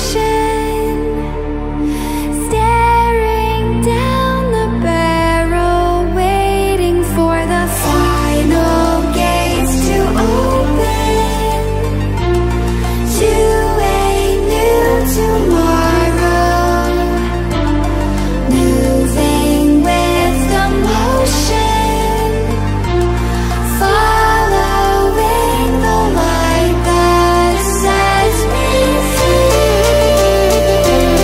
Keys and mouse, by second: 0.0-8.5 typing, 9.1 Return, 10.1 click, 12.9 Caps_Lock, 15.1-16.9 typing, 18.0 right click, 20.4 click, 23.3 click, 25.9-31.2 drag.